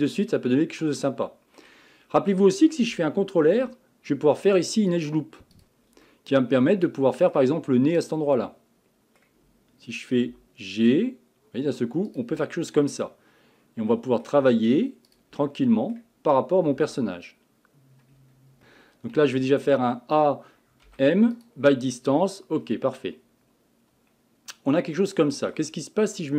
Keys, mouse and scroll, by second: 3.5 ctrl+r, 6.1-8.0 middle drag, 8.0 click, 8.3-10.3 middle drag, 10.3 g, 12.4-15.1 middle drag, 15.1 click, 15.4-16.7 middle drag, 16.7 g, 18.6 middle click, 19.1 a, 19.4 a, 20.9 m, 22.6-23.0 scroll down 2, 23.0-26.0 middle drag.